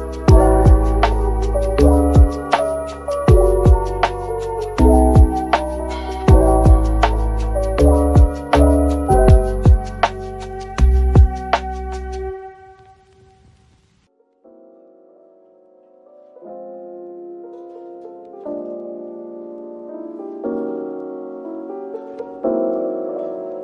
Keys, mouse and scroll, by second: 0.3 Tab, 0.7 middle click, 1.5-1.8 scroll down 1, 2.9-3.3 typing, 4.5 ctrl+click, 4.6-4.9 scroll up 1, 6.9 scroll down 1, 22.6-23.3 scroll up 1.